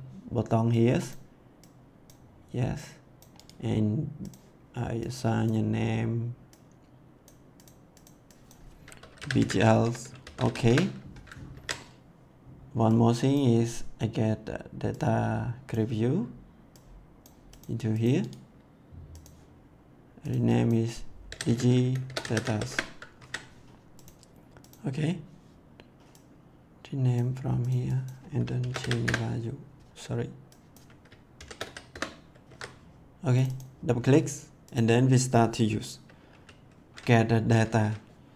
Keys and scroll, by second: 8.9-10.9 typing, 11.5 ctrl+s, 21.0-22.9 typing, 23.1 ctrl+s, 28.3-29.2 typing, 31.1-32.1 typing, 32.4 ctrl+s.